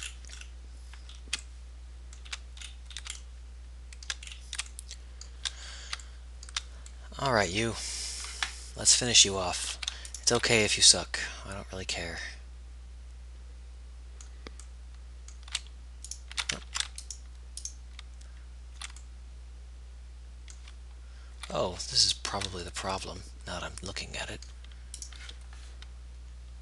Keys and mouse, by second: 16.9 ctrl+z, 25.2-26.6 right drag.